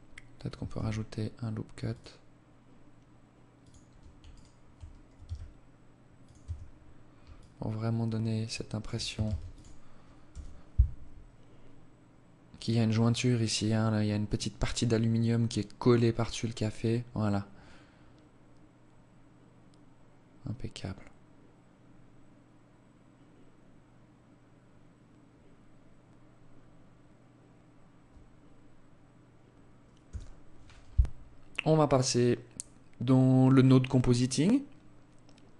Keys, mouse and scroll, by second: 3.3 alt+right click, 4.1 s, 5.3 Tab, 5.8 scroll down 3, 6.3 alt+click, 8.1 ctrl+s, 28.9 Escape, 29.9-30.5 scroll down 1, 34.7 alt+click.